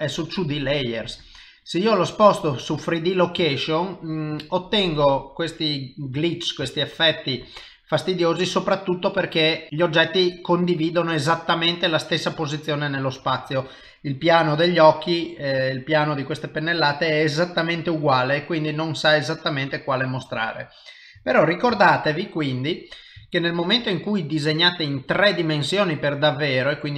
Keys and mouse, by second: 2.6 middle click, 3.6 ctrl+middle click, 4.4 middle click, 6.3 ctrl+middle click, 6.7 shift+middle click, 7.3 middle click, 11.7 middle click, 17.9 middle click, 20.3 click, 21.3 ctrl+middle click, 21.8 shift+middle click, 22.6 middle click, 23.3 shift+middle click, 23.9 middle click, 25.2 shift+middle click, 25.7 middle click.